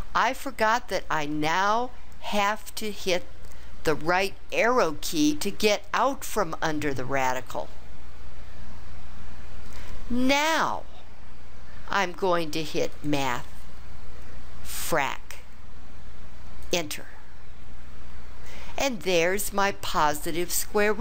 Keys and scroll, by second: 4.4 Right, 14.9 Return, 16.6 Return.